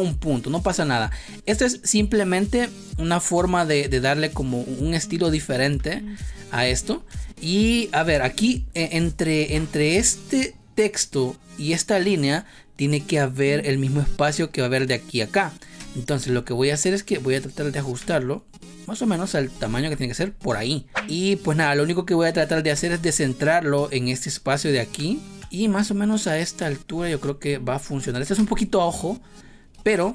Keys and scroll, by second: 15.7 space, 21.0 ctrl+z, 22.7 space, 28.3 space.